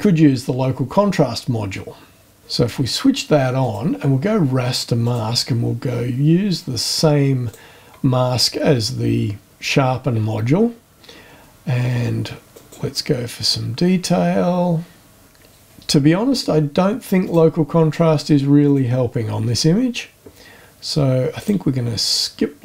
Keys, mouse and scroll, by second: 3.6 click, 5.0 click, 7.4 click, 12.5 click, 17.5 click, 18.6 click, 21.4 click.